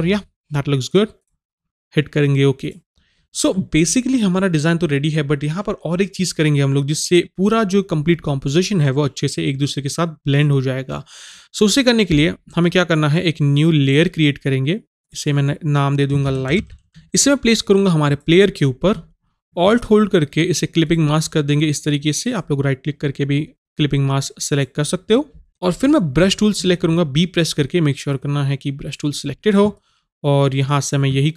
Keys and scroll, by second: 16.5 i, 26.3 b.